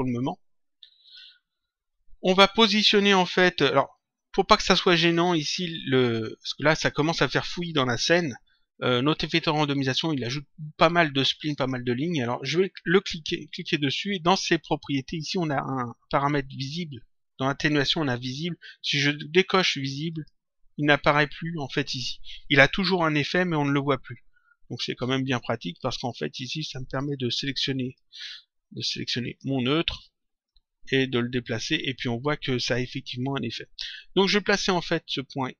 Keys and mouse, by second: 1.0 click, 13.0 click, 20.1 click, 26.3 click, 29.2 click, 30.4 click.